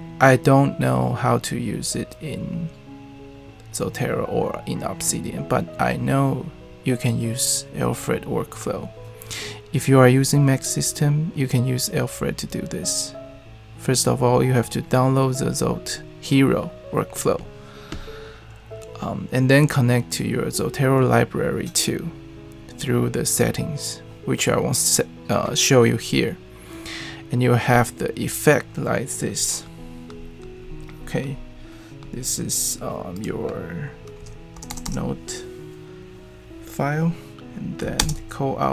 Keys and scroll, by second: 34.5 Return, 34.7 Return, 34.8 Return, 38.0 alt+space.